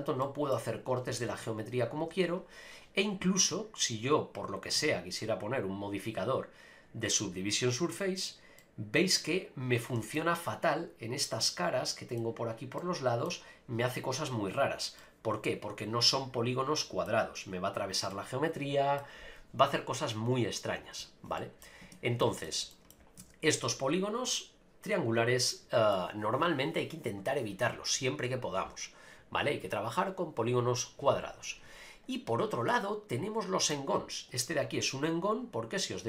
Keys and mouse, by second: 0.2-0.5 middle drag, 1.2 ctrl+r, 2.0 Tab, 3.9 click, 4.6-6.4 drag, 8.0 click, 8.6-9.8 middle drag, 10.0 shift+middle click, 11.5-12.2 middle drag, 12.8-13.4 middle drag, 15.0-17.1 middle drag, 18.1-19.0 middle drag, 20.5 click, 21.4 middle click, 21.8 Tab, 22.2 shift+middle click, 22.7 middle click, 23.2 ctrl+r, 25.5 middle click, 32.7-33.7 middle drag.